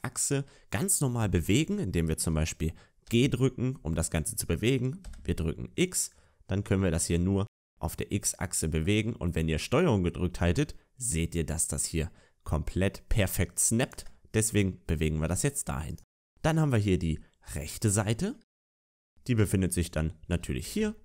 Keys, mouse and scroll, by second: 3.0 g, 15.0 scroll down 2, 15.8 right click, 17.1-17.4 scroll down 1, 17.4 shift+middle click, 20.3 shift+middle click, 20.3 g.